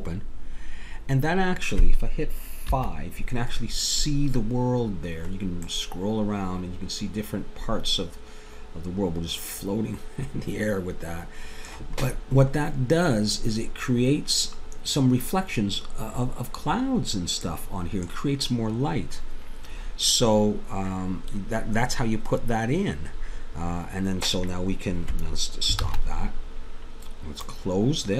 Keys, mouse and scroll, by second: 0.0-1.6 drag, 2.9 KP_5, 5.0 click, 6.4 middle click, 7.5 middle click, 7.8 middle click, 12.2-15.0 middle drag, 17.5-19.9 middle drag, 25.9 shift+z, 27.5 click.